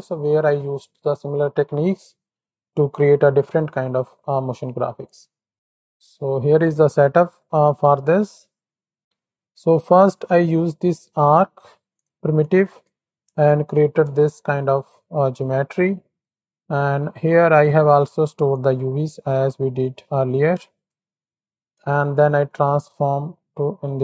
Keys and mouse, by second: 5.5 click, 6.3 click, 9.9 ctrl+shift+click, 10.6-11.1 middle drag, 11.9 click, 12.4 click, 13.6 ctrl+shift+click, 14.3-15.3 middle drag, 15.8 middle click, 16.5 middle click, 17.5 ctrl+shift+click, 18.6 click, 19.8-20.9 drag, 21.2 middle click, 21.9 ctrl+shift+click, 23.3-24.0 middle drag.